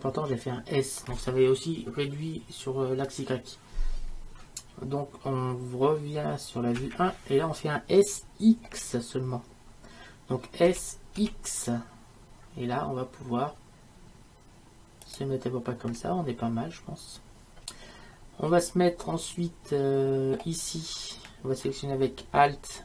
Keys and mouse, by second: 6.8 KP_1, 10.7 s.